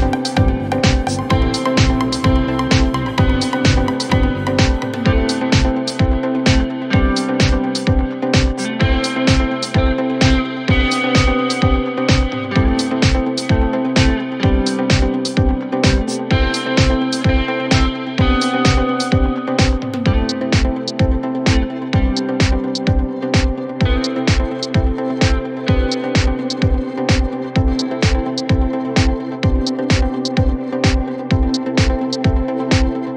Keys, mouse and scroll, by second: 1.8 g, 4.8 alt+click, 5.4 g, 8.1 click, 8.2-8.5 scroll down 5, 8.9 Tab, 9.8-11.0 middle drag, 11.0 KP_1, 11.7 click, 11.8-12.5 scroll up 8, 12.2 Tab, 13.3 alt+click, 13.8 g, 16.4 alt+click, 17.0-18.4 middle drag, 18.4 KP_1, 18.8-19.1 scroll down 2, 19.1 scroll up 2, 19.6 s, 22.4 scroll down 4, 22.6 middle click, 23.2 ctrl+z, 23.8 s, 25.0 middle click, 25.3 ctrl+z, 26.1 KP_1, 26.4 scroll up 2, 27.1 s.